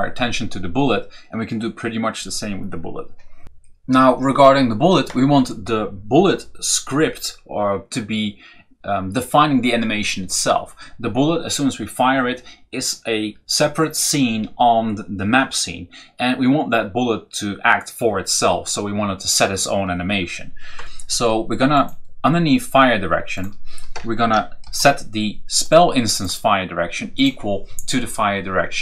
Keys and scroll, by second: 23.8 Return, 24.5 ctrl+v.